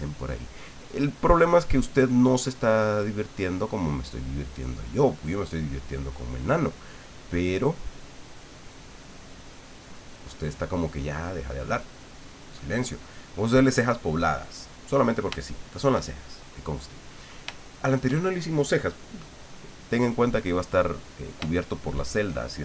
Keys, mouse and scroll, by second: 13.1-15.2 drag, 15.4 shift+click, 16.0-16.5 shift+scroll up 1, 16.5 click, 17.6 shift+click, 18.1-18.5 shift+scroll up 1, 20.3-21.4 drag, 21.6 shift+middle click.